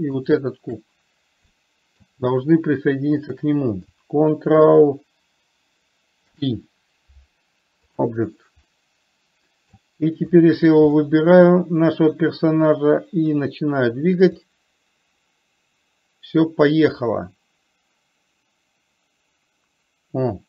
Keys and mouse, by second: 0.5 shift+click, 1.8-2.2 middle drag, 3.7 shift+click, 6.6 ctrl+p, 9.0-10.1 middle drag, 10.7 click, 11.3 middle click, 15.0-20.4 drag.